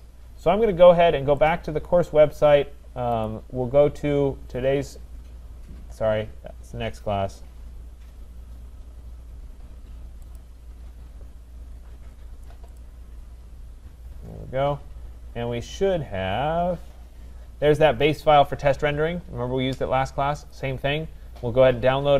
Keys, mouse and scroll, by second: 1.5 click, 3.3 click, 4.1-4.5 scroll up 5, 4.5-5.9 scroll down 1, 5.9 scroll down 4, 10.4 click, 10.6-11.1 scroll down 1, 11.7-12.8 scroll down 10, 12.8 click, 14.2-15.4 scroll down 4, 15.4-16.1 scroll, 16.1-17.0 scroll, 17.0 scroll, 20.5 click.